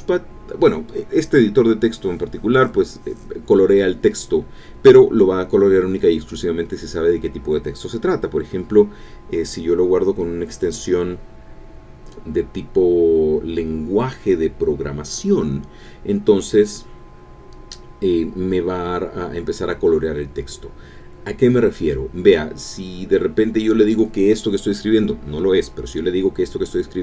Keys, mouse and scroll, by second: 0.9 shift+Up, 1.2 shift+Return, 1.5 shift+Up, 2.2-9.2 typing, 9.7 Down, 10.8 Right, 11.3 Up, 11.9 shift+End, 13.4 click, 17.7 click, 18.3 click.